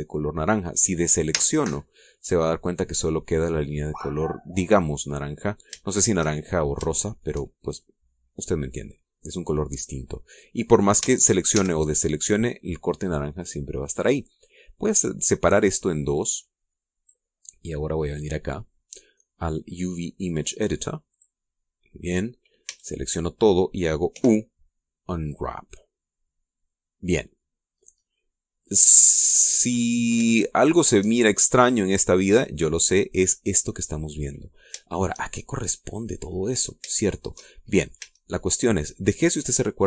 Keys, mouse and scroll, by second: 0.2 scroll down 2, 1.9 a, 2.5-5.5 drag, 5.6 scroll down 2, 6.1-6.5 scroll down 3, 6.5 shift+click, 7.0 shift+click, 7.4 shift+middle click, 10.9 middle click, 11.6 a, 15.1-17.9 drag, 18.7 click, 21.7 click, 23.3 a, 24.7 u, 25.9 click, 28.3-30.3 scroll up 4, 30.5-30.8 scroll down 2, 31.0 shift+middle click, 31.8-32.9 shift+scroll down 6, 35.4-36.8 shift+middle drag, 37.1-37.5 scroll up 3, 37.7 shift+middle click, 38.6 a, 39.0-39.8 middle drag.